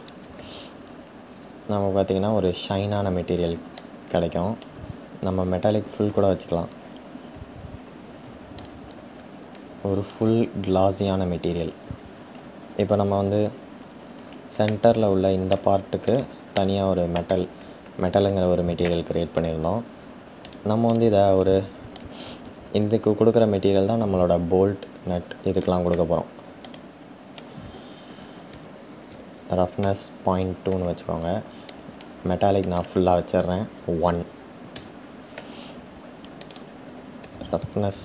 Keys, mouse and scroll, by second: 0.8-2.1 scroll up 6, 2.1-3.4 scroll up 1, 3.4-5.7 drag, 5.7-8.0 scroll down 3, 8.0 scroll down 1, 8.2-11.0 drag, 11.0-14.2 scroll up 5, 14.2-15.7 middle drag, 15.7 click, 16.2-20.4 middle drag, 20.4 click, 21.8-24.6 drag, 29.3 click, 31.6-34.3 drag, 36.5-38.0 drag.